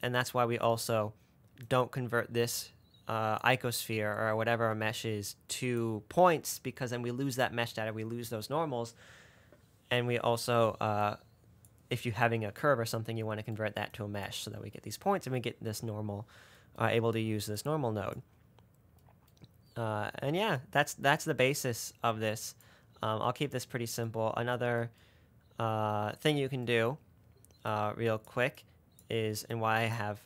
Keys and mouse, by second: 0.3 middle click, 2.0-3.8 middle drag, 5.9 middle click, 11.3 middle click, 14.3 middle click, 22.9-25.1 middle drag, 27.9-28.5 drag, 28.9-29.4 drag, 29.9 click.